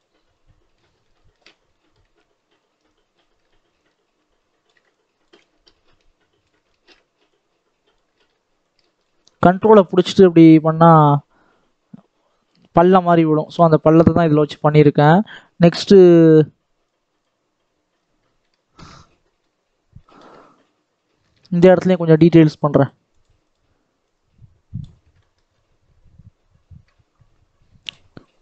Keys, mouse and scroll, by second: 0.0 shift+click, 0.8 scroll down 1, 0.9 shift+middle click, 1.4 scroll up 1, 1.6-2.8 shift+middle drag, 2.8-6.6 ctrl+drag, 6.6 shift+middle click, 7.2 click, 8.0 ctrl+z, 8.5-12.1 ctrl+drag, 12.7 shift+click, 13.5 scroll down 1, 13.8-15.2 shift+middle drag, 17.2 middle click, 17.8-18.4 scroll up 3, 18.4 right click, 18.5 shift+middle click, 18.8-19.1 scroll down 1, 19.1 shift+middle click, 19.4-19.9 scroll up 1, 19.9-23.0 shift+middle drag, 23.0-25.1 drag, 25.1 shift+middle click, 25.4-27.8 scroll up 4, 27.8 click, 28.3 scroll down 1.